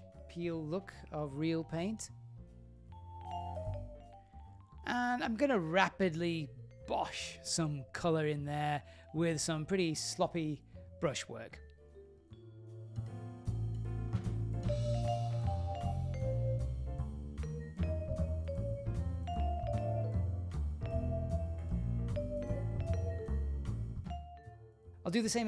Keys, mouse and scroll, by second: 1.3 click, 2.1-2.8 drag, 2.8 typing, 3.7-5.8 drag, 7.7 middle click, 8.2 ctrl+middle click, 8.8 shift+middle click, 10.9 click, 11.9 click, 12.5 click, 12.7 click, 12.9 f, 13.0 click, 13.1 click, 13.2 shift+middle click, 13.4 click, 13.9 middle click, 14.3-14.7 click, 14.4 click, 15.0 click, 15.2 click, 16.2 click, 16.4 click, 16.8 super+z, 17.3 click, 17.4 click, 17.5 click, 17.9 click, 18.2 shift+f, 18.4 shift+middle click, 18.8 click, 19.1 click, 19.5 middle click, 19.7-20.4 click, 20.3 click, 21.0 click, 21.1 click, 21.2 click, 21.3 click, 21.4 click, 21.5 shift+f, 21.6 click, 21.7 click, 21.8 ctrl+middle click, 21.9-22.9 click, 22.0 click, 22.6 click, 22.9 ctrl+middle click, 23.2 click, 23.3 click, 23.3 click, 23.4 click, 23.5 middle click, 23.6 click, 23.7 click, 23.8 click, 23.8 click, 23.9 shift+middle click, 24.2 click, 24.3 click, 24.9 click.